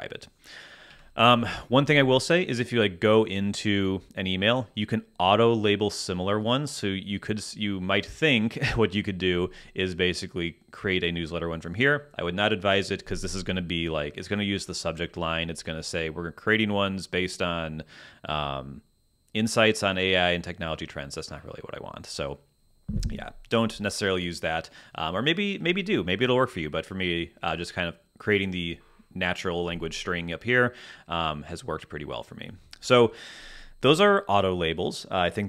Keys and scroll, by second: 0.9 Escape.